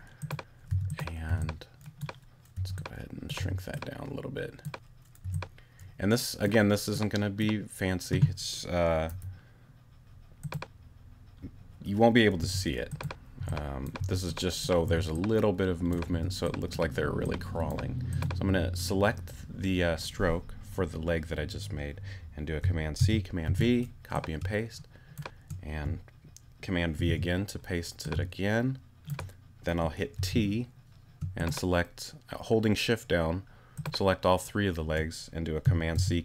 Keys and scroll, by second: 1.3 w, 2.5 w, 3.4 t, 5.2 w, 9.1 q, 12.4 t, 16.1 t, 23.0 super+c, 23.4 super+v, 24.4 shift+super+v, 26.9 super+v, 30.1 shift+t, 31.2 shift+t, 35.9 shift+super+c.